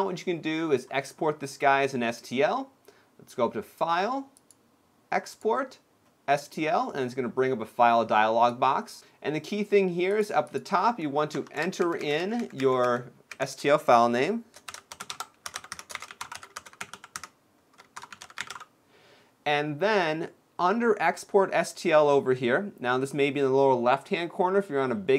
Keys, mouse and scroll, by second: 4.0 click.